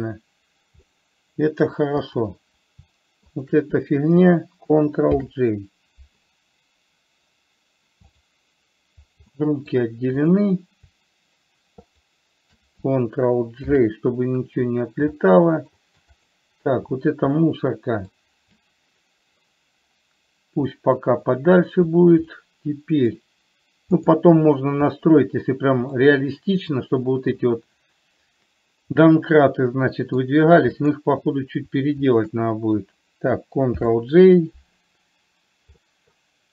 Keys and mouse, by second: 0.2 click, 1.2-2.0 middle drag, 2.4 click, 3.7 shift+click, 5.5 ctrl+j, 8.4 click, 9.7-10.2 middle drag, 12.4 shift+click, 14.0 ctrl+j, 15.5-16.0 shift+middle drag, 17.8-18.4 middle drag, 20.9-21.9 drag, 22.7 middle click, 25.2-26.3 middle drag, 29.4-30.7 middle drag, 31.3 click, 34.0 ctrl+j, 36.2 middle drag.